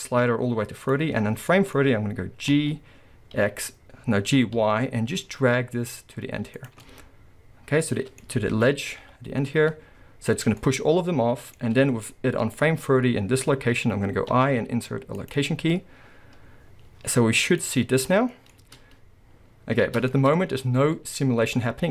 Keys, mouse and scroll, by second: 1.5-6.5 middle drag, 2.5 g, 6.7 click, 6.9-12.1 middle drag, 8.5 g, 12.4-17.6 middle drag, 17.6-18.3 drag, 18.2 scroll down 2, 18.3-21.9 middle drag, 18.6 space, 20.7-21.3 scroll up 2, 21.3-21.9 scroll down 2.